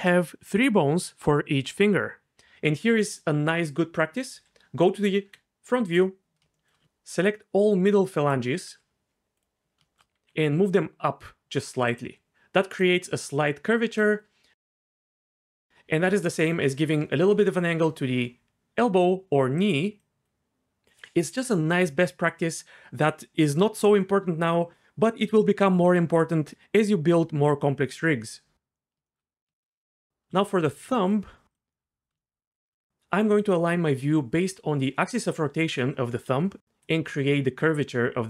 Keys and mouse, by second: 4.3 KP_3, 5.2 KP_1, 8.7 g, 9.4 click, 10.2 g, 10.4 z, 11.9 click, 12.3-14.7 d, 14.9 middle click, 15.7 d, 17.5-20.9 d, 17.8 click, 36.9 g.